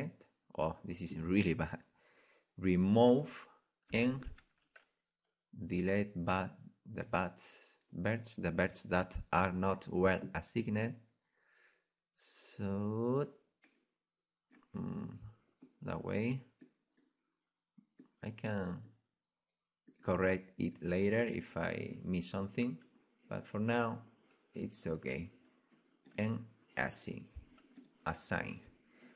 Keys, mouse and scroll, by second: 1.7-3.0 middle drag, 3.0-4.8 drag, 4.4 c, 21.8-26.1 right drag, 23.0-24.2 middle drag, 26.1-28.7 drag, 28.9-29.1 drag.